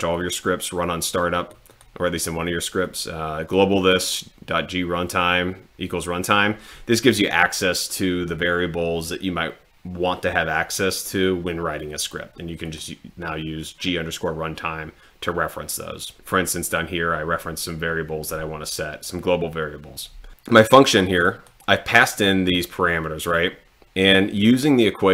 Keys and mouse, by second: 0.1-1.6 drag, 2.8 click, 3.8 click, 12.7 click, 20.7 click, 22.2 click.